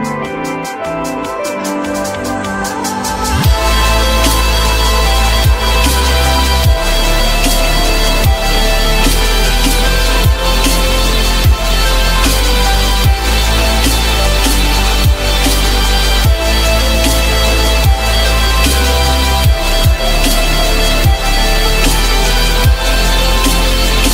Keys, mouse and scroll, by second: 11.5 shift+click, 12.5 Delete, 13.4 q, 13.8 alt+middle click, 15.2 alt+middle click, 18.8 alt+middle click, 20.2 ctrl+click, 20.5 ctrl+click, 20.7 ctrl+double click, 21.0 ctrl+click, 21.5 ctrl+click, 21.8 ctrl+click, 22.3 ctrl+click, 22.4 ctrl+double click, 22.6 ctrl+click.